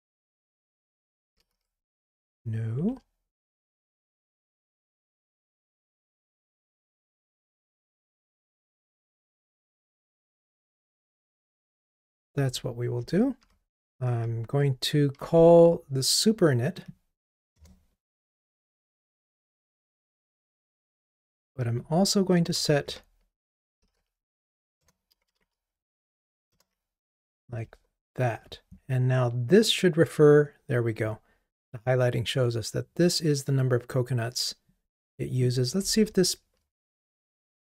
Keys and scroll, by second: 0.5 super+j, 2.4 Escape, 6.1 Escape, 6.4 Return, 24.9 Return, 36.0 ctrl+r.